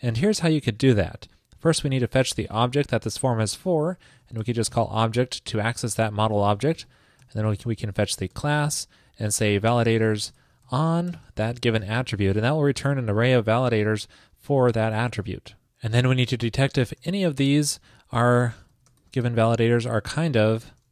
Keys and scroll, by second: 12.5 super+Right.